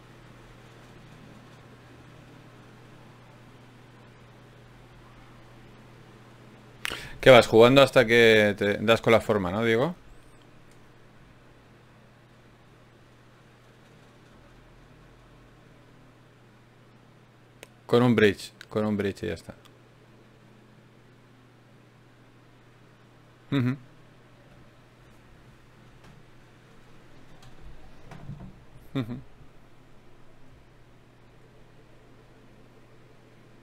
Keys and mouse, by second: 7.0-13.7 drag, 13.7 ctrl+z, 15.2 ctrl+Tab, 19.1 f, 20.5 ctrl+r, 24.3 g, 25.3-26.7 drag, 26.7 f, 27.4 click, 29.9-31.3 drag, 30.5 f, 31.7 f, 32.8 KP_Divide.